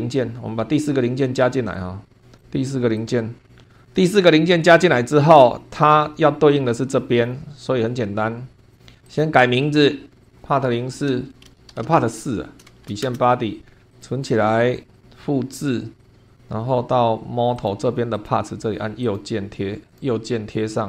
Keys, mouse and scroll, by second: 0.0 super+2, 1.2 click, 2.4 click, 2.9 click, 3.8 shift+middle click, 4.2-5.5 shift+middle drag, 5.5 scroll up 1, 7.1-7.5 scroll down 1, 8.7 click, 9.1 right click, 10.2 click, 11.1 Home, 11.4-12.7 typing, 13.0 shift+Return, 13.9 click, 15.0 right click, 16.0 click, 16.2 click, 17.6 click, 18.1 click.